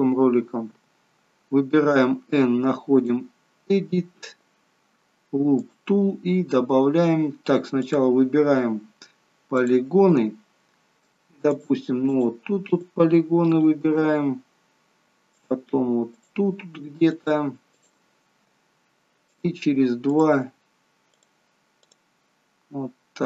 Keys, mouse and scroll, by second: 0.7 n, 3.0 click, 5.6 click, 8.0 click, 9.6 click, 11.6 shift+click, 12.1 click, 12.8 shift+click, 13.5 shift+click, 15.4 shift+click, 16.2 shift+click, 17.2 shift+click, 17.8 shift+click, 19.3 shift+click, 20.1 shift+click, 21.2 shift+click, 22.0 shift+click.